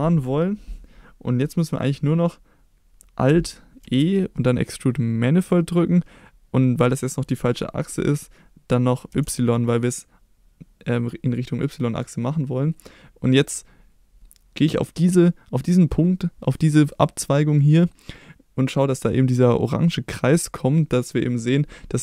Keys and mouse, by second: 3.8 alt+e, 9.1 y.